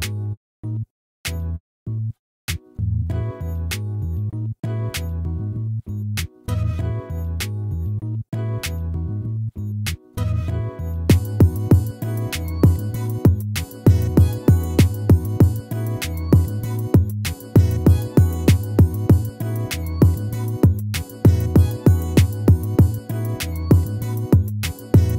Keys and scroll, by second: 4.7 ctrl+z, 9.0 ctrl+z, 15.6 ctrl+z, 18.6 ctrl+z, 24.3 ctrl+z.